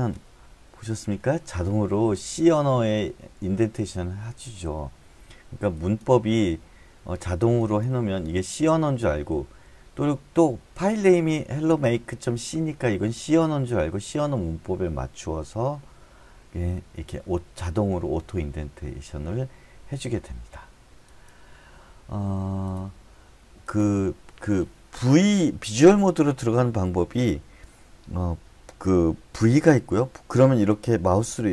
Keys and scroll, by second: 0.4 Escape, 29.5 v.